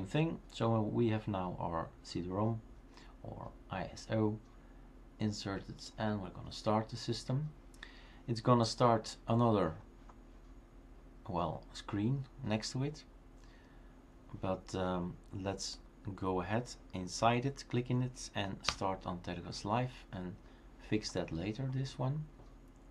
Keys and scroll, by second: 18.7 Return.